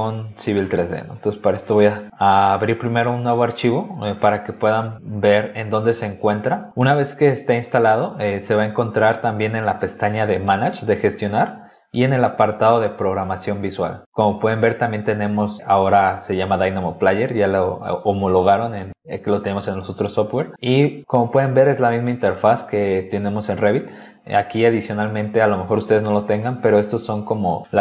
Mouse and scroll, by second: 0.0 click, 1.1 click, 3.7 click, 10.3 click, 13.1 click, 23.2 click, 24.2 click.